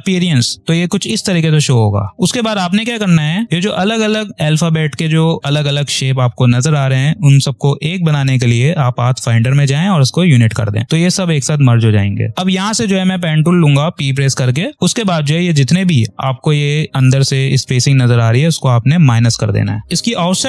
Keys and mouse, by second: 0.2 click, 0.8 space, 3.3 click, 8.9 click, 12.3 click, 13.0 p, 14.1 ctrl+=, 14.7 click, 14.9 space, 15.1 click, 19.0 click.